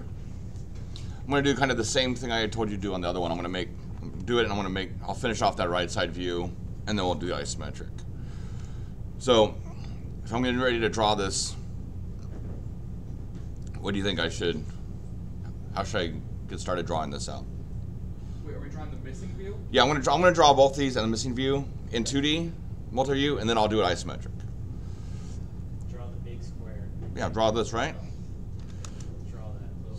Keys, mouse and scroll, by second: 28.6 l, 28.8 Return.